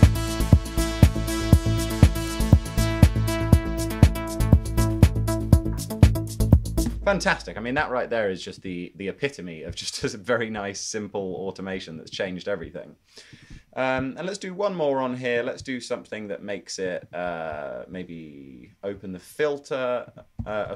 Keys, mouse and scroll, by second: 20.3-20.7 typing.